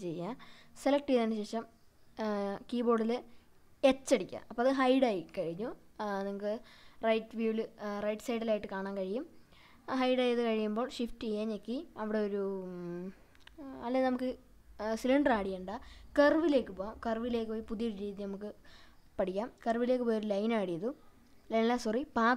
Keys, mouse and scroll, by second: 1.8 click, 3.7 h, 6.0-6.8 middle drag, 8.1 shift+a, 19.6-20.1 scroll down 1, 20.1-20.7 middle drag.